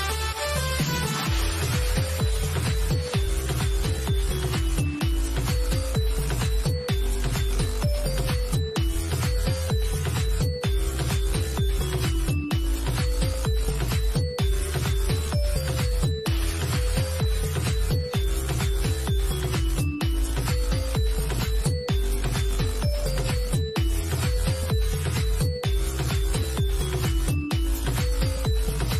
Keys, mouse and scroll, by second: 0.4-2.2 drag, 4.3 middle click, 4.9 scroll down 1, 5.3 middle click, 7.4 scroll down 1, 8.3 middle click, 8.3 scroll up 1, 8.4 middle click, 8.9 scroll down 1, 9.2 middle click, 10.4-11.6 scroll down 1, 11.6 middle click, 12.6 scroll up 1, 14.0-16.4 drag, 16.8 scroll down 1, 23.4 click.